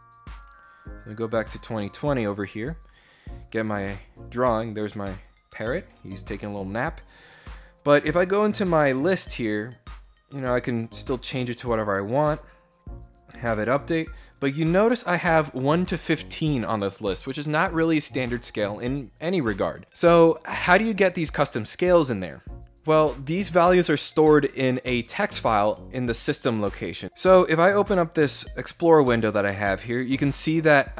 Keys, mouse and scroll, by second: 0.0 click, 8.4 click, 13.3 click, 27.7 click.